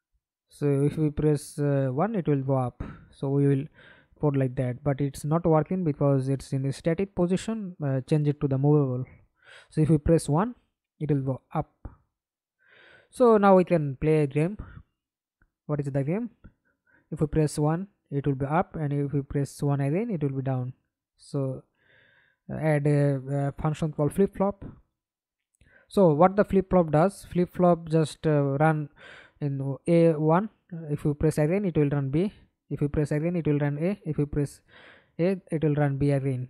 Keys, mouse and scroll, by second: 1.0 Escape, 1.4 middle click, 2.1 F11, 4.2 double click, 5.5 middle click, 6.8 middle click, 7.7 F11, 8.1 alt+p, 10.8 1, 14.4 Escape, 14.9 middle click, 15.7 F11, 17.9 scroll up 2, 23.1-24.2 typing, 25.6 Return, 31.0 right click, 33.7 double click, 34.9 ctrl+c, 35.8 ctrl+v.